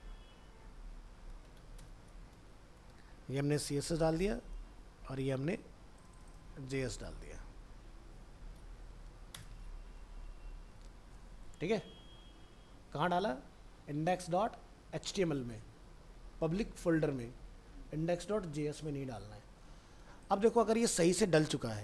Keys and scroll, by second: 2.3 ctrl+v, 3.9 ctrl+End, 4.3 alt+Tab, 6.6 ctrl+c, 7.4 alt+Tab, 9.6 ctrl+v, 10.7 ctrl+s, 21.1 ctrl+s, 21.5 ctrl+w.